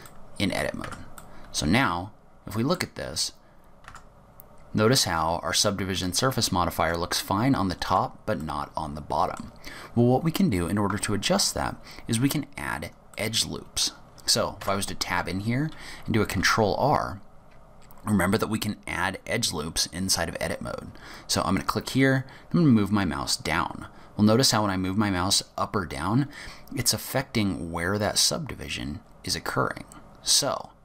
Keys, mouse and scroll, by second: 0.2 middle click, 1.0 Tab, 1.3 middle click, 3.2 Tab, 4.0 Tab, 4.6 scroll up 1, 6.0 click, 6.9 Tab, 8.0 Tab, 8.5 middle click, 9.8 scroll down 2, 10.2 scroll up 2, 13.2 middle click, 14.7 Tab, 16.5 ctrl+r.